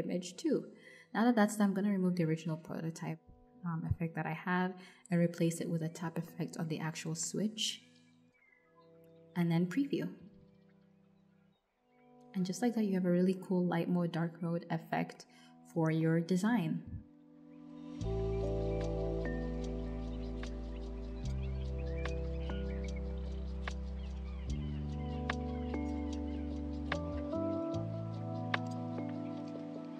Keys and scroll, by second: 0.8 BackSpace, 5.4-6.4 typing.